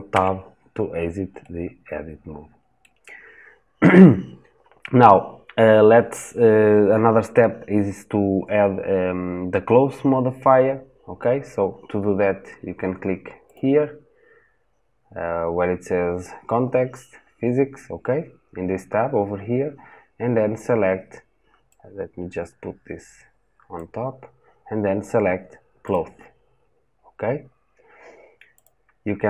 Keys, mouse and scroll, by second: 0.7 scroll down 1, 1.2-25.8 middle drag, 25.8-29.2 drag.